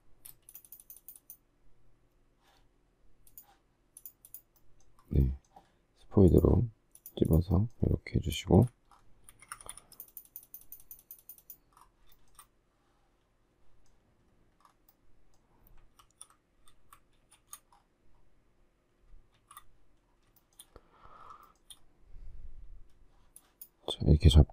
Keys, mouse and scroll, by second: 0.3 space, 8.5 Escape, 8.5 space, 9.3 Escape, 12.1 shift+middle click, 16.0 alt+f, 16.8 shift+z, 17.2 shift+a, 18.8 shift+s, 19.4 shift+z, 20.4 shift+middle click, 21.4 shift+middle click.